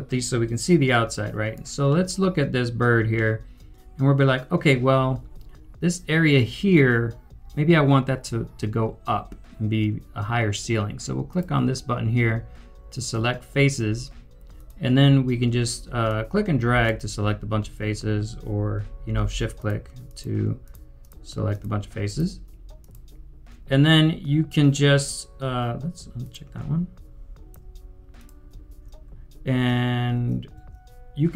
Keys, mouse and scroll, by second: 1.0 typing, 1.1 right click, 1.9 middle click, 19.1 middle click, 19.5 shift+click, 22.8 shift+click, 26.2 shift+click, 28.1 ctrl+click, 30.5 ctrl+click.